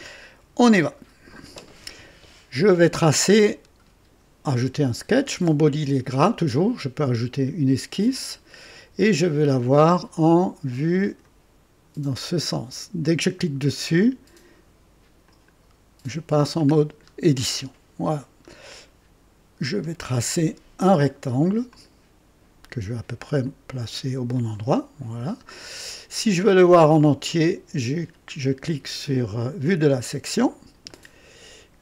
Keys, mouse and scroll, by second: 0.9 click, 3.3-4.3 drag, 8.1 click, 9.1-9.5 scroll down 2, 9.8-11.4 drag, 15.2 click, 16.6-16.9 scroll up 2, 17.4-18.0 right drag, 18.2 scroll up 2, 18.6-19.8 right drag, 19.9 scroll up 2, 21.7 click, 23.4 click, 24.3 click, 25.0 scroll up 2, 25.9 right click, 29.6 click, 30.8 right click, 31.5-31.8 scroll up 2.